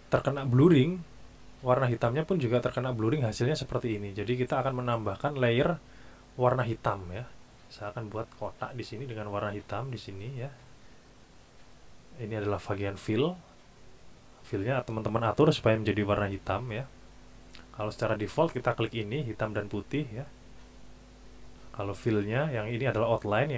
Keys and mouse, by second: 8.3 click, 10.2 click, 11.2 click, 18.8 click.